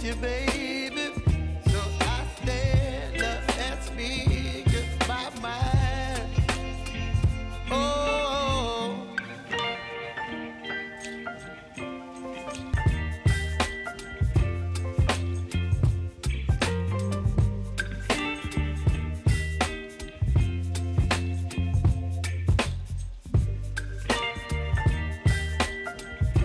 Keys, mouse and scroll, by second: 0.7 ctrl+shift+c, 1.3 shift+a, 1.9 Return, 2.5 click, 3.7 ctrl+shift+c, 4.3 s, 5.0 Return, 5.8 click, 6.4 Page_Down, 7.2 click, 7.9 [, 8.4 Page_Down, 8.9 click, 9.4 [, 9.8 Page_Down, 10.4 click, 10.9 [, 11.3 Page_Down, 12.1 click, 12.7 [, 13.1 Page_Down, 13.6 click, 14.2 [, 14.7 space, 17.0 space, 17.6 click, 18.0 space, 20.4 space, 21.4-25.9 drag.